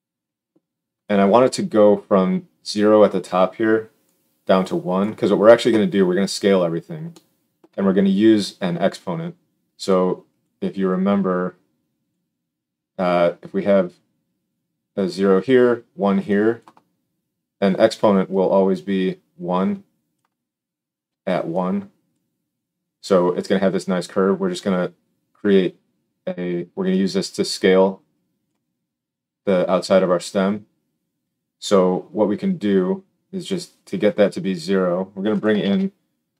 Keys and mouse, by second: 35.5 shift+a.